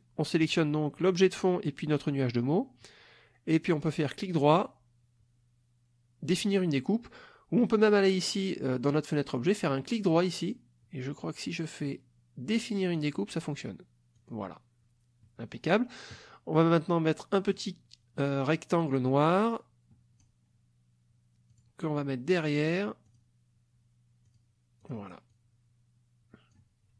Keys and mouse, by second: 4.6 right click, 9.7 right click, 10.3 right click, 13.0 click, 14.2 click, 15.3 middle click, 17.5 click, 18.8-20.4 drag, 21.5 click, 23.1 click, 24.3 click, 24.8 click, 25.3-26.7 drag.